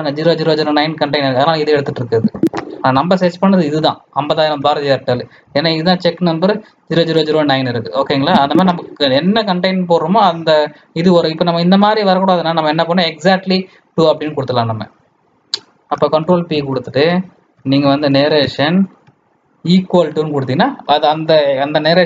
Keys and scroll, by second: 16.5 ctrl+p.